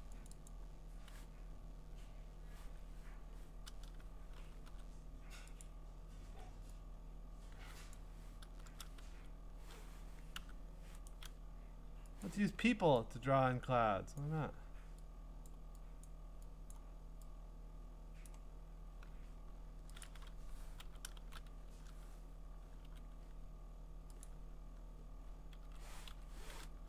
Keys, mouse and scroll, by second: 0.3 click, 0.5 click, 2.5 Escape, 4.7 g, 5.6 click, 6.3 g, 7.9 click, 8.7 ctrl+z, 9.1 g, 10.3 u, 11.1 right click, 12.2 click, 14.2 click, 15.5 click, 16.0 click, 16.7 click, 18.2 click, 20.0 click, 20.9 v, 21.2 alt+shift+n, 22.8 g, 24.2 click, 25.4-26.8 typing.